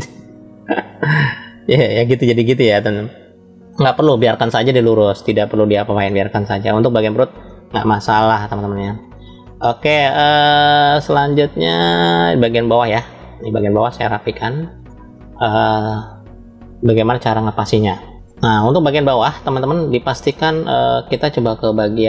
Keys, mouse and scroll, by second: 1.9-3.8 middle drag, 4.2 ctrl+z, 5.2 ctrl+z, 6.1 middle click, 7.4 shift+middle click, 9.1 shift+middle click, 10.0-11.3 middle drag, 12.0-12.8 scroll down 2, 13.2-14.7 shift+middle drag, 18.1-19.2 middle drag, 19.4 shift+middle click.